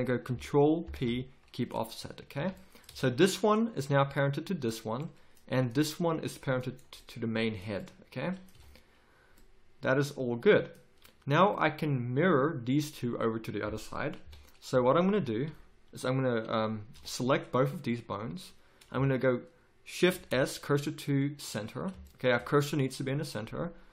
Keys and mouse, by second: 0.8 ctrl+p, 2.3 a, 2.9 z, 8.5 a, 14.2 KP_1, 15.1 z, 16.9 b, 20.1 shift+s.